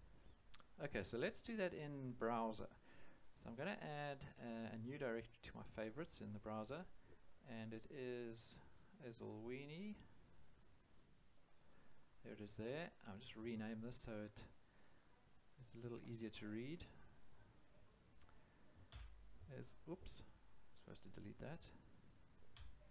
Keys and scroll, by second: 18.9 End, 22.5 Delete.